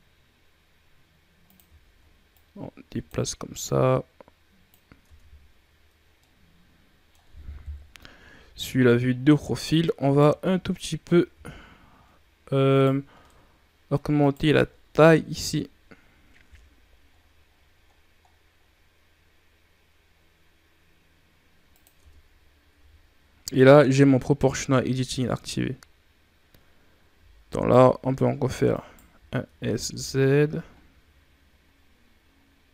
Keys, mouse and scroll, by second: 2.2-4.9 drag, 4.9 Tab, 5.9 scroll down 2, 6.1-7.5 middle drag, 7.5 KP_3, 8.4 ctrl+scroll down 2, 8.8 scroll up 5, 9.5 right click, 10.3 ctrl+z, 11.2 g, 13.0 scroll down 1, 13.2 middle click, 14.1 right click, 15.1 KP_3, 16.3 g, 21.9 Tab, 22.6 a, 23.1-23.8 scroll down 2, 23.8-24.4 ctrl+scroll up 3, 24.6 Tab, 27.4 alt+right click, 28.6 alt+right click, 29.4 s.